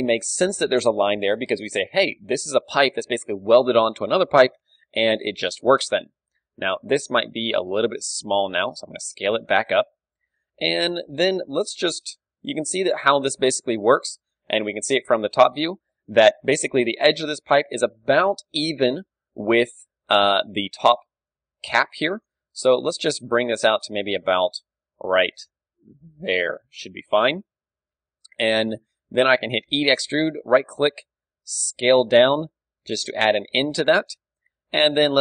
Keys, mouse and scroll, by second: 4.5 KP_3, 4.9-7.2 middle drag, 5.9 Tab, 6.2 a, 6.7 click, 7.2 s, 8.5 right click, 8.6 middle click, 8.7 click, 8.7 KP_1, 9.5-18.8 middle drag, 9.6 click, 11.1 KP_3, 20.3 d, 20.5-22.2 drag, 21.6 d, 22.0 right click, 22.4-24.1 middle drag, 23.1 g, 26.7-28.6 drag, 27.1 ctrl+w, 28.6-30.3 middle drag, 29.7 e, 30.5-32.6 right drag, 30.9 s, 34.1 click, 34.5 middle click.